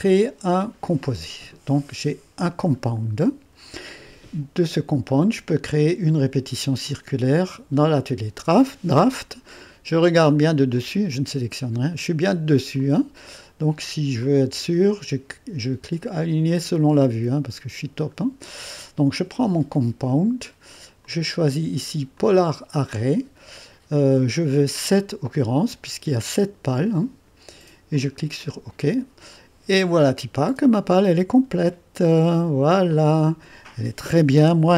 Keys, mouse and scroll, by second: 0.0 click, 0.9 click, 2.5 click, 5.5 click, 7.8 click, 10.3 click, 10.8 click, 11.9 click, 12.8 click, 14.2 click, 16.5 click, 19.5 click, 21.0 click, 22.2 click, 24.5 click, 26.4 click, 27.1 click, 28.0-29.5 drag, 30.0-32.7 drag, 33.0 click, 34.1 click, 34.4 2.